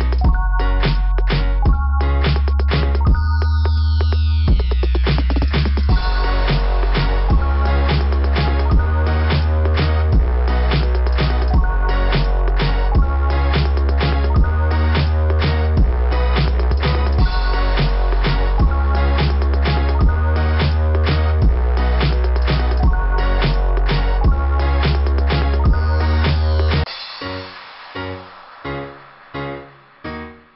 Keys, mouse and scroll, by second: 0.2 click, 0.4 click, 3.5 click, 3.7 click, 9.5 click, 9.8 click, 11.7 click, 13.0 click, 14.9 scroll up 2, 19.1 scroll down 2, 21.8 click, 23.6 click, 24.0 click, 27.5 click, 28.5 click, 30.3 click.